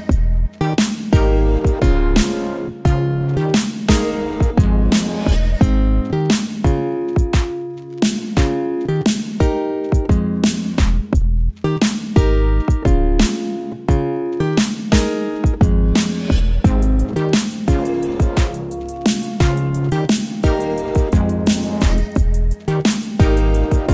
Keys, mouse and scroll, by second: 4.5 shift+click, 6.4 click, 8.6-9.4 typing, 11.1 Return, 12.8 click, 13.8 ctrl+0.